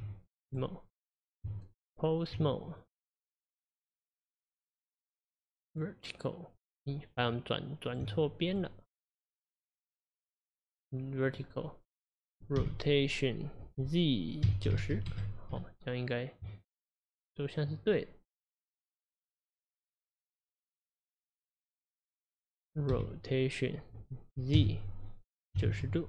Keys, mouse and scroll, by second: 0.0 Tab, 0.5 click, 1.5 Tab, 2.8 click, 4.3 click, 7.2 Tab, 8.5 click, 11.3 click, 12.6 r, 17.1 click, 19.0 click, 21.2 click, 22.9 r.